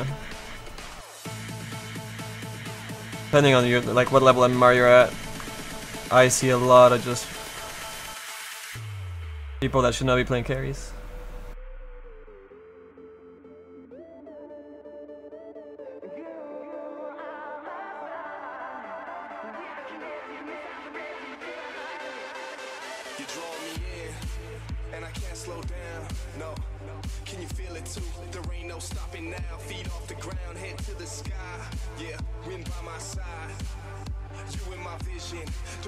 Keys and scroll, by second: 21.3 s, 25.4 s.